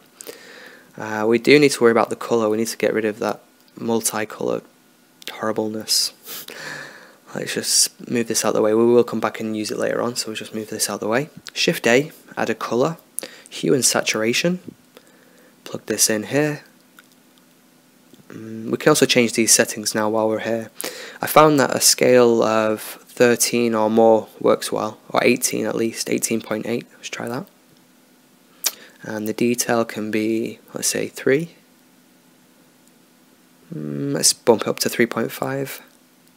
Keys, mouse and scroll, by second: 6.7-8.8 middle drag, 8.8 shift+a, 15.2-17.5 drag, 17.6 click, 17.9-21.1 middle drag, 23.0-25.7 drag, 30.7-32.3 drag, 35.7 click.